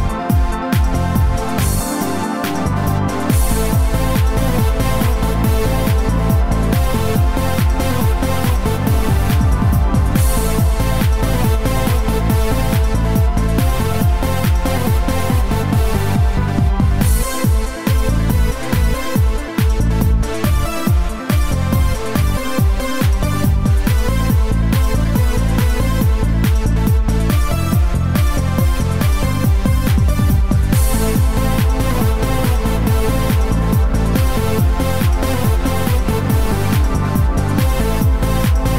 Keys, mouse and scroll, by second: 2.8 middle click, 5.0 KP_5, 6.2-6.7 scroll down 4, 7.7 middle click, 10.1-11.1 scroll down 4, 19.8 click, 26.6 click, 27.9-28.3 scroll up 5, 28.8 scroll up 1, 28.8 middle click, 30.5 middle click, 31.6 scroll up 1.